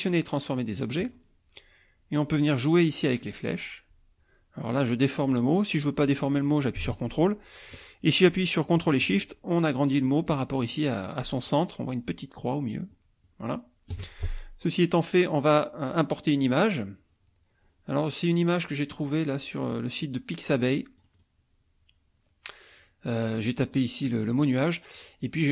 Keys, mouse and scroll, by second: 1.0 click, 3.5-14.1 drag, 18.3 click, 19.7 click, 20.6 click, 21.0 click, 23.6 click, 24.2 click, 25.0 click.